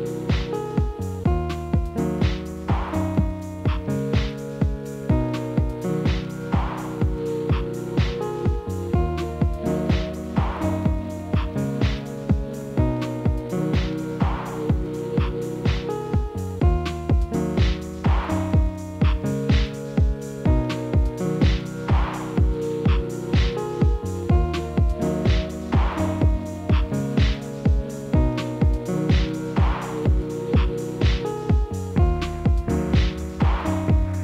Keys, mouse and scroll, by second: 0.5 g, 1.7 drag, 2.3 s, 3.1 KP_3, 4.0 g, 5.1 click, 5.4 g, 6.7-7.4 middle drag, 7.4 shift+z, 8.1 KP_1, 8.7-9.1 middle drag, 9.1-9.7 scroll up 1, 9.7 drag, 10.3 drag, 10.9 s, 13.1 shift+z, 13.3-14.0 scroll up 3, 14.0 g, 15.3 scroll down 2, 15.4-16.2 middle drag, 16.2 shift+click, 17.5 KP_7, 19.0-20.0 scroll down 1, 20.0 g, 20.9-21.9 middle drag, 21.9-22.5 scroll up 2, 22.5 KP_7, 23.2 g, 24.8 shift+d, 26.2 middle click, 26.8 ctrl+z, 28.8 click, 29.7 KP_Divide, 30.4 shift+z, 30.7 click, 30.9-31.5 middle drag, 31.5-32.0 scroll up 5, 32.0-33.4 middle drag, 33.4 click, 34.0 shift+click.